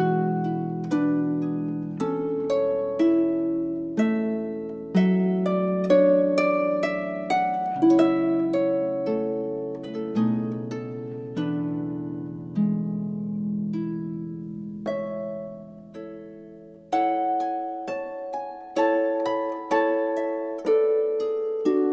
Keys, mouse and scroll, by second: 0.4 i, 9.8-10.9 drag, 11.9-13.7 drag, 16.1-20.0 drag.